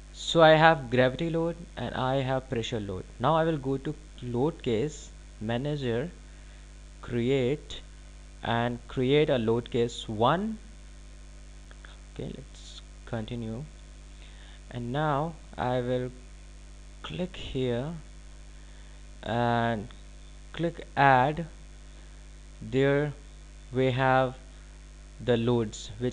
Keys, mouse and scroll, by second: 5.0 click, 13.2 click, 18.4 click, 22.5 click.